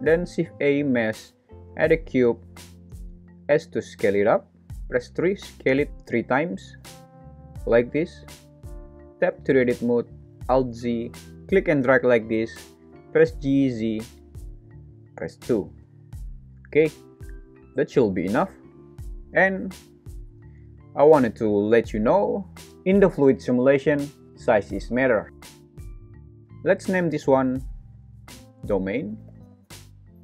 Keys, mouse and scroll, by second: 0.2 shift+a, 3.5 s, 5.0 KP_3, 5.5 Return, 6.9 alt+z, 8.1 alt+z, 9.2 Tab, 10.3 alt+z, 11.4 click, 13.2 g, 13.8 z, 15.3 KP_2, 15.8 Return, 18.0 Tab, 28.1 F2.